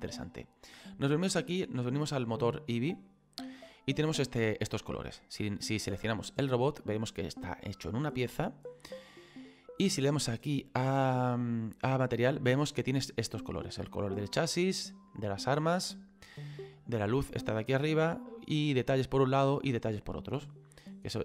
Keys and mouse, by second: 2.4 click, 6.3 right click, 12.1 click, 14.1 click, 16.3 click, 18.2 click, 19.5 click.